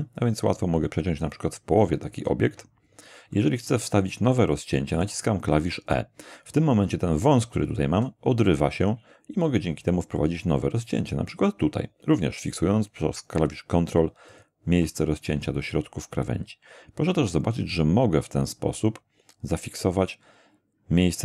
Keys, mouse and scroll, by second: 2.2 ctrl+click, 4.1-5.2 middle drag, 8.3 e, 14.3 ctrl+click.